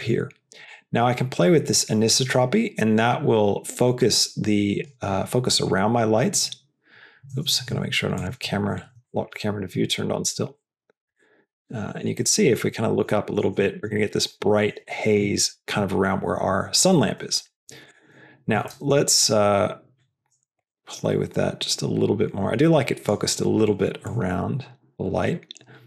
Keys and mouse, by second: 0.7-4.8 drag, 8.9 shift+middle drag, 9.7 q, 10.4 middle click, 11.0-11.4 shift+middle drag, 11.5 middle click, 12.1 middle click, 12.6 shift+middle click, 13.0 middle click, 13.5 shift+middle click, 13.9 middle click, 14.8 shift+middle click, 18.6 shift+middle click, 20.6-23.0 drag, 24.0-25.8 shift+drag.